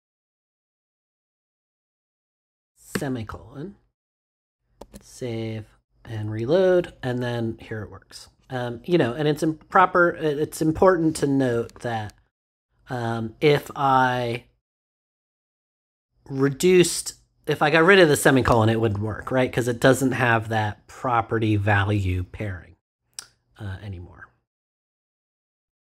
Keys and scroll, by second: 2.8 ;, 4.7 super+s.